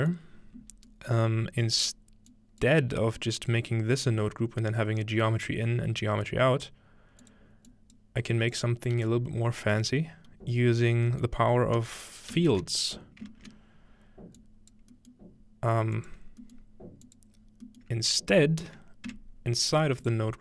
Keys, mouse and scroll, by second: 2.3-5.3 drag, 7.2 click, 7.7 click, 8.3 click, 9.0 g, 9.6 click, 11.1-12.7 scroll up 1, 12.3-12.7 ctrl+middle drag, 12.3 typing, 14.4 click, 15.4-17.2 scroll up 2, 16.0-16.4 drag, 17.1 click, 17.4-18.9 scroll down 2, 19.1 Tab, 19.7-20.4 scroll up 3, 20.0 click.